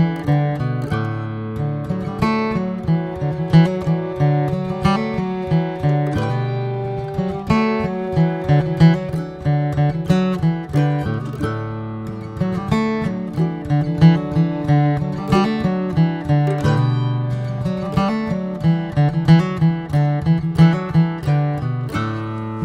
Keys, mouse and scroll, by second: 0.0 click, 2.2 scroll down 1, 2.9 click, 3.9 r, 5.5 scroll down 2, 5.8 Tab, 6.0 drag, 6.6 shift+middle click, 7.0 click, 7.3-8.9 middle drag, 8.9 scroll up 1, 9.3-9.8 shift+middle drag, 10.6 alt+middle drag, 11.1 Tab, 11.4 shift+middle click, 11.8 scroll up 2, 12.3 shift+middle click, 12.4 shift+scroll up 2, 12.8 click, 14.2 click, 15.3 r, 17.4 ctrl+z, 17.9 click, 19.7 r, 21.5 click, 22.4 ctrl+z.